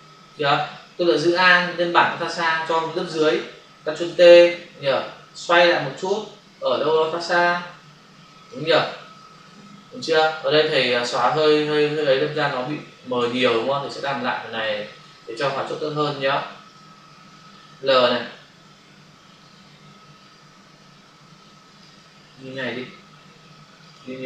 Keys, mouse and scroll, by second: 1.2 alt+click, 5.4 click, 6.8 shift+click, 9.0 Return, 10.4 click, 13.1 ctrl+alt+z, 19.3 click, 22.3 ctrl+alt+d, 23.8 click, 23.9 click.